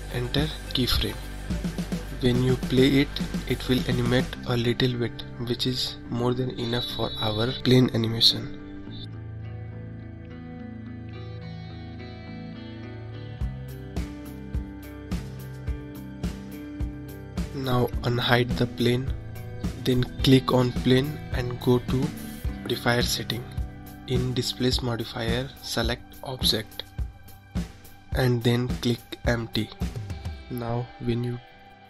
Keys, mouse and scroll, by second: 1.2-5.3 drag, 8.4-11.5 middle drag, 11.5-13.2 scroll up 4, 13.2-14.2 scroll down 4, 14.2-17.7 drag, 18.3-19.3 middle drag, 19.3-19.9 scroll down 2, 19.9-21.0 scroll down 1, 21.0 click, 22.4 click, 24.2-31.3 drag, 31.3-31.8 scroll up 2.